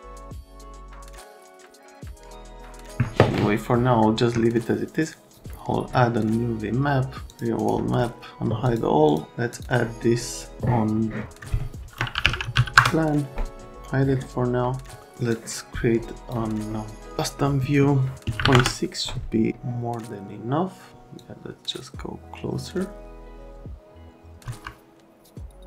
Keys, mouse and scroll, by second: 0.0 click, 0.6 click, 2.0 click, 7.3 click, 7.5 right click, 8.6 click, 9.1 click, 9.5 click, 11.9-13.0 typing, 15.3 click, 15.3 middle click, 18.4 KP_Decimal, 18.5 KP_Enter, 18.5 KP_6, 21.1 middle click, 22.3 click.